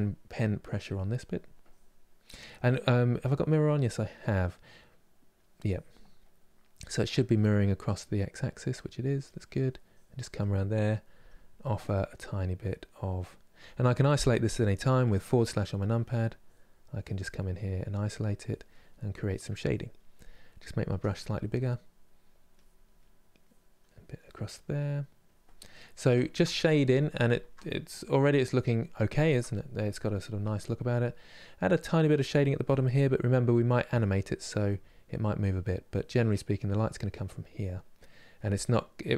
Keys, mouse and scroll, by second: 0.0 click, 0.8 middle click, 1.4 click, 2.2-5.4 middle drag, 5.4 click, 5.9-8.9 middle drag, 8.9-10.9 drag, 10.9 f, 11.7-14.7 middle drag, 14.7 KP_Divide, 15.1 middle click, 16.1 click, 17.1 middle click, 17.6 click, 18.6-20.6 middle drag, 20.6 f, 21.3 click, 21.8 middle click, 22.3 click, 22.7 middle click, 23.1 click, 23.6-25.0 middle drag, 25.0 click, 25.3-31.8 middle drag, 31.8 click, 32.6 middle click, 33.2 click, 33.7 middle click, 34.3 click, 34.8 middle click, 35.6 click, 36.0-39.1 middle drag.